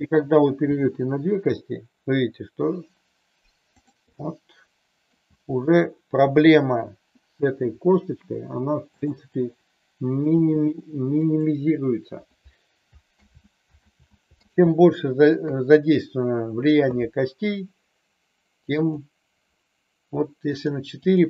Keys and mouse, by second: 0.5 g, 3.7 click, 4.2-5.1 middle drag, 5.3 g, 8.9 click, 9.3-10.2 middle drag, 10.3 g, 11.2 click, 13.2 ctrl+z, 13.8 ctrl+z, 14.4 ctrl+z, 15.3 KP_3, 18.8 click, 20.5 click, 21.0 click.